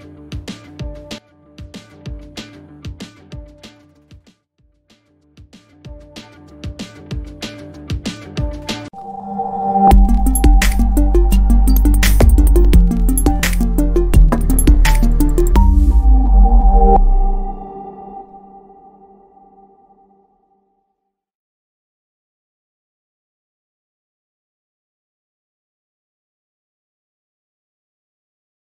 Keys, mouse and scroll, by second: 0.0-1.7 drag, 4.5 1, 5.5-7.9 drag.